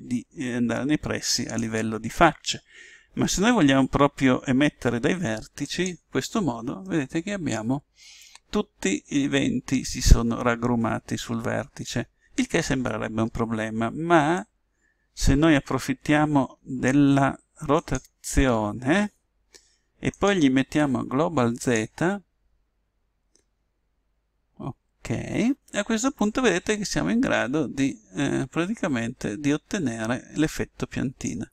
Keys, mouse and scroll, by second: 5.5 click, 6.9 click, 7.1 click, 7.5-8.9 middle drag, 14.3 click, 19.5 click, 20.1 click, 26.2 click.